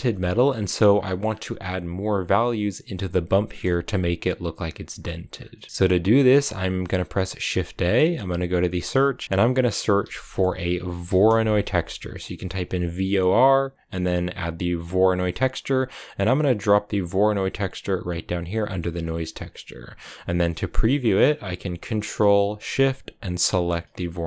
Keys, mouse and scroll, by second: 0.3-0.9 scroll up 3, 0.9 middle click, 1.0 scroll up 4, 2.0 click, 5.2 scroll down 4, 5.4-7.3 middle drag, 7.3 shift+a, 18.4 middle click, 18.6-19.0 scroll up 2, 19.0-22.2 drag, 23.5 ctrl+shift+click, 23.9 middle click.